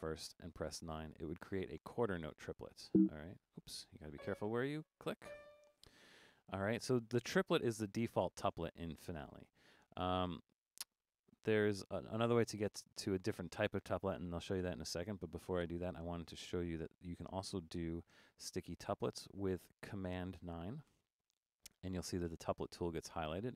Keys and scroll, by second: 0.9 9, 17.5 4, 20.9 super+9.